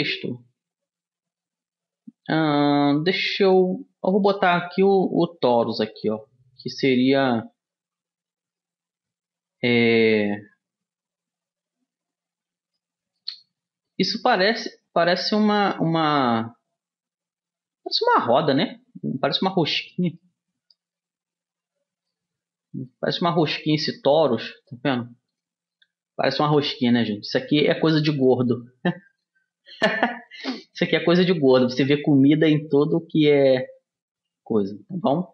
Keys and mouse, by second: 8.7-10.5 drag, 10.5-12.5 middle drag, 13.6-15.5 middle drag, 15.5-17.3 drag, 18.6-19.6 middle drag, 19.6-21.3 drag, 21.3-23.6 middle drag, 27.3 g, 31.0-32.9 middle drag, 32.9 g, 34.9-35.3 middle drag.